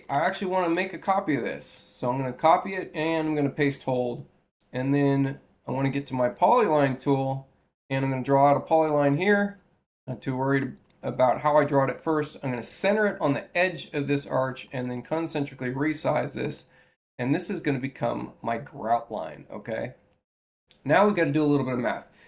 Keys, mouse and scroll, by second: 0.5 click, 1.3 c, 2.6 shift+c, 6.1 click, 8.2 click, 10.6 click, 11.7 i, 11.8 i, 12.4 click, 14.5 ,, 14.7-19.6 drag.